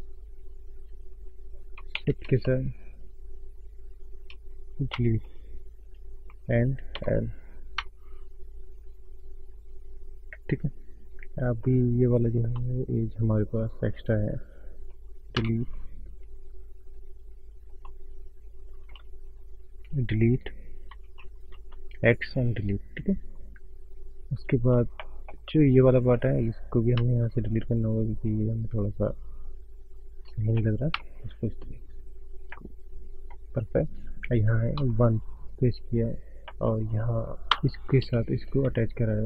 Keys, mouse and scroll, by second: 0.0 click, 2.9 shift+click, 5.0 Delete, 6.4 click, 7.8 Delete, 9.4-10.0 scroll down 3, 10.0-10.3 scroll up 4, 11.6 middle click, 12.5 click, 13.4 shift+click, 14.1 alt+shift+click, 15.4 Delete, 16.9 click, 25.0 shift+middle click, 26.1 click, 26.6-26.9 scroll up 3, 29.0 click, 31.0 Delete, 32.1-32.6 scroll down 4, 32.6 middle click, 34.0 scroll down 1, 35.0 KP_1, 35.8 scroll up 2, 36.8 middle click, 37.5 Tab, 37.9 click, 38.3 shift+click.